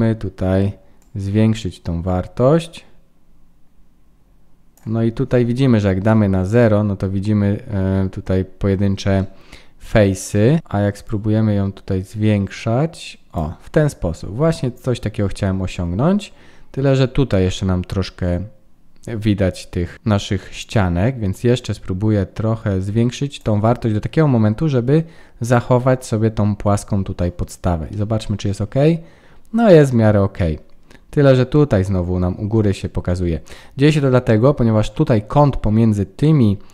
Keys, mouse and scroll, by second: 0.9 click, 5.2-5.7 scroll down 1, 5.7 scroll down 2, 5.9 scroll up 1, 6.0 middle click, 7.6-9.1 scroll up 1, 9.1 middle click, 9.1 scroll up 1, 10.6 scroll up 1, 11.0 click, 13.6-14.8 scroll down 4, 15.3 middle click, 16.9-18.5 scroll up 3, 19.1 middle click, 20.7 click, 27.5-28.0 scroll down 2, 27.8 middle click, 28.6-29.3 scroll up 5, 29.7 middle click, 30.7-31.2 scroll down 1, 31.2-32.2 scroll down 1.